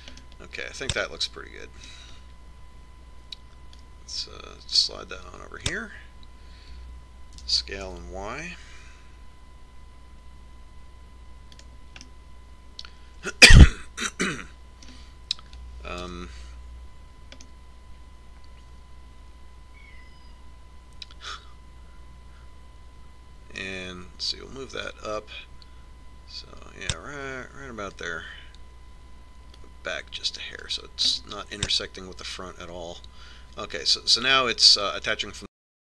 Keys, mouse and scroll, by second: 0.8-2.7 drag, 2.7-3.9 middle drag, 5.6-7.3 drag, 9.2 s, 13.9-15.7 middle drag, 17.9 KP_3, 19.4 middle click, 26.8-28.6 drag, 31.6-33.4 drag, 33.1 middle click, 33.4-34.9 middle drag.